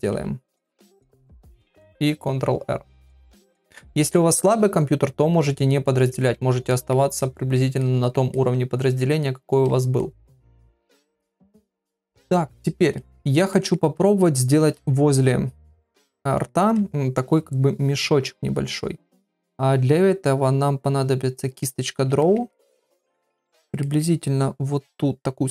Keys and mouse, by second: 0.1 shift+r, 4.0 ctrl+r, 5.6 middle click, 6.7 ctrl+middle click, 7.2 middle click, 7.8 middle click, 8.3 middle click, 9.2 middle click, 10.0 middle click, 10.9 ctrl+middle click, 11.2 middle click, 11.5 shift+middle click, 11.9 ctrl+middle click, 13.0 shift+middle click, 13.5 ctrl+middle click, 15.3 ctrl+middle click, 21.5 click, 22.2 ctrl+middle click, 22.5 middle click, 23.1 middle click, 23.8 middle click.